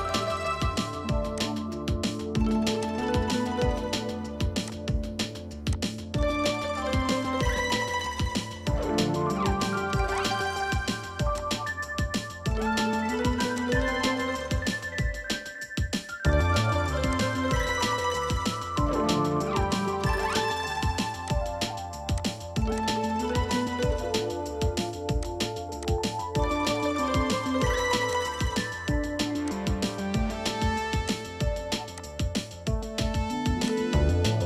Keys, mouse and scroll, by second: 0.2 right click, 3.6 scroll down 1, 8.3 Escape, 8.6 Escape, 12.1 middle click, 15.3-15.7 typing, 16.0 Return, 16.7 scroll up 1, 18.7 Escape, 18.9 Escape, 19.3 right click, 23.2-23.7 scroll up 1.